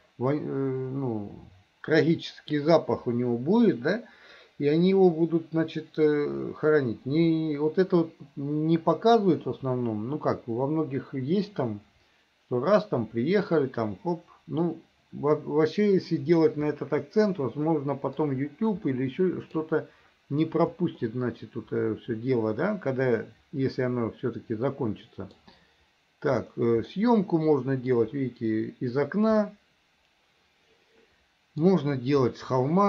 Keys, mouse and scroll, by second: 17.4 middle click, 19.0 middle click, 21.1-25.4 middle drag, 27.0-28.1 middle drag, 29.5-31.7 middle drag, 32.3-32.8 middle drag.